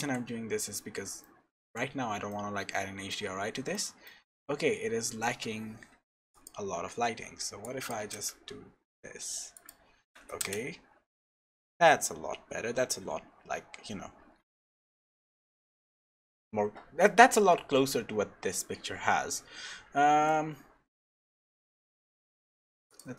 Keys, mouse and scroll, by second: 1.2 shift+middle click, 1.8 scroll up 3, 2.3 shift+middle click, 3.4 scroll up 2, 3.7 middle click, 6.3 click, 9.6 click, 15.0 middle click, 22.9 click.